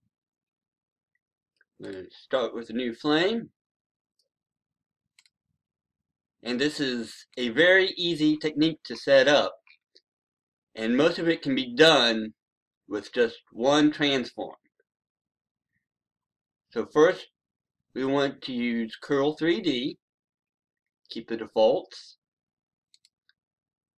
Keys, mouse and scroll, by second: 8.2 scroll up 1, 10.5-11.1 scroll down 1, 11.1-11.9 scroll up 1, 12.4-12.9 scroll down 1, 18.8 click.